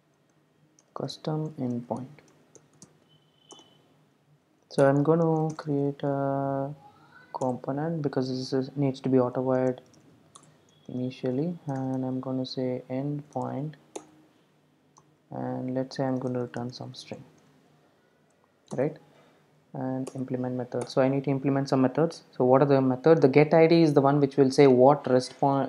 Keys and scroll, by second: 7.5 Return, 18.7 alt+Return, 20.8 alt+Return.